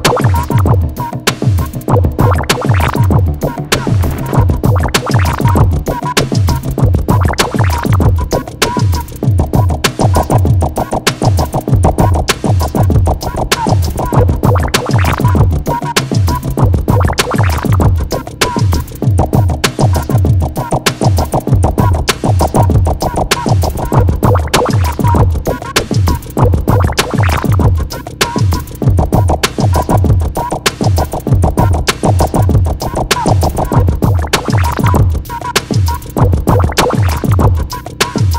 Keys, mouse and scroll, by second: 0.6-1.2 scroll up 1, 1.5 middle click, 2.0 scroll down 1, 2.3 l, 3.1 click, 8.6 click, 14.4 click, 14.8 Escape, 15.1 click, 15.4 x, 15.6-16.0 scroll up 1, 16.5 middle click, 16.9 Escape, 17.8 scroll, 17.9 scroll down 1, 18.1 l, 18.7 click, 23.5 Escape, 25.2-25.5 scroll down 1, 25.9 scroll down 1, 26.5 l, 27.3 x, 28.8 click, 30.1-30.6 scroll up 1, 30.8 scroll down 1, 30.9 Escape, 31.4-32.0 scroll down 1, 32.1 click, 32.3 d, 32.8 click, 33.1 scroll up 1, 33.4 1, 34.1 6, 34.5 Return, 35.5 Escape, 36.7 click, 36.9 d, 37.3 click, 37.5 1, 37.8 6, 38.3 Return.